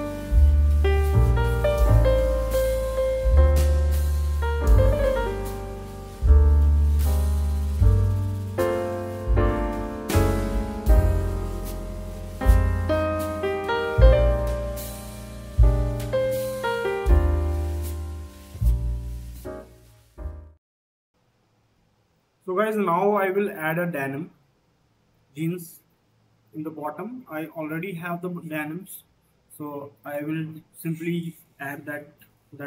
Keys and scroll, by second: 21.1 2.